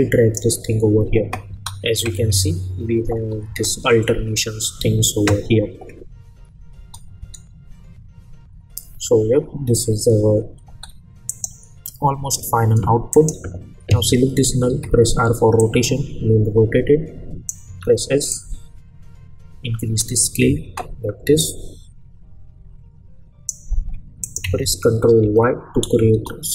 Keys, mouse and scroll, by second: 1.5 space, 6.7 space, 10.7 space, 11.3 click, 14.7 r, 15.6-17.7 drag, 17.6 s, 18.3-20.1 drag, 25.2 ctrl+y, 26.1 Return.